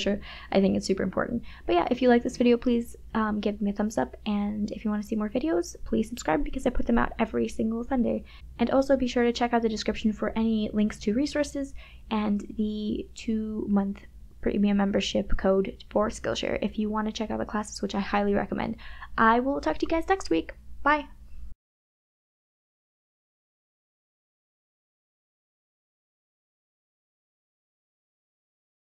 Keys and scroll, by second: 0.1 KP_Subtract, 0.5 KP_Add, 1.4 KP_Subtract, 1.5 e, 1.5 KP_Add, 3.8 KP_Subtract, 4.1 KP_Add, 7.3 KP_Subtract, 7.4 KP_Add, 8.0 space, 9.0 KP_Subtract, 9.2 KP_Add, 9.7 ], 11.6 KP_Subtract, 12.3 space, 12.7 KP_Add, 12.8 space, 13.5 [.